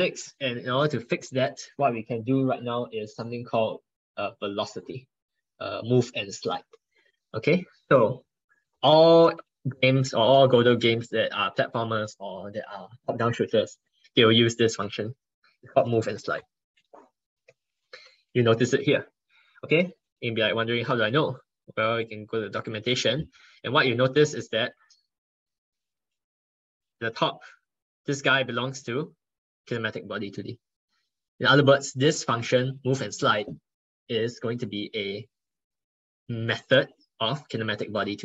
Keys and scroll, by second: 9.2 ctrl+Right, 9.4 ctrl+Right, 10.7 ctrl+Right.